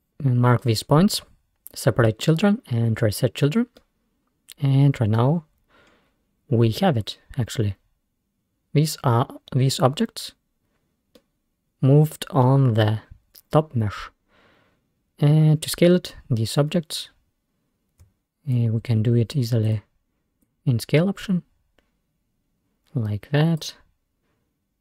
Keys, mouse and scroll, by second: 0.7-3.0 scroll up 1, 3.0-3.4 scroll up 1, 3.8-5.4 middle drag, 5.4-5.9 scroll down 3, 5.9-6.3 scroll up 2, 11.2-13.1 middle drag, 13.1-13.5 scroll down 1, 13.5 scroll up 2, 16.3 scroll down 1, 18.6-19.8 ctrl+drag, 20.5-23.6 drag.